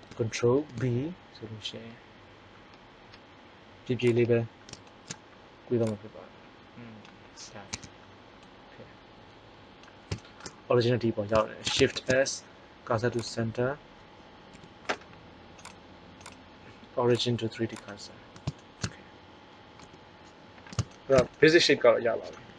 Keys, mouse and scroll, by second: 0.5 ctrl+b, 5.8-6.8 drag, 7.6 Tab, 11.8 shift+s, 14.4 t, 18.5 middle click, 19.7 t.